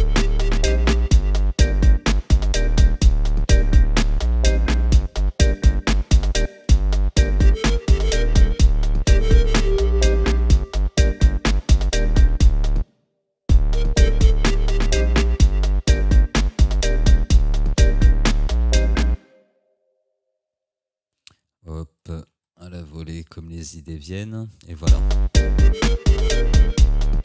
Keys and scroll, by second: 6.5 space, 12.8 space, 19.2 space, 24.8 space.